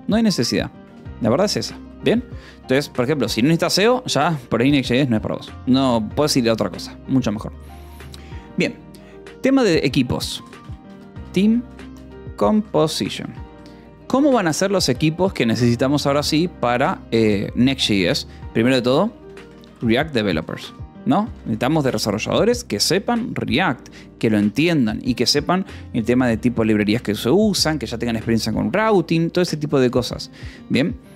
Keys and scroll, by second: 0.6 k, 1.7 j, 2.1 k, 3.7 Escape, 4.0 j, 6.1 o, 6.5 Return, 9.6-13.4 typing, 13.1 Escape, 14.6 :, 14.7 space, 19.2-21.9 typing, 22.4 Escape, 29.7 :, 29.9 space.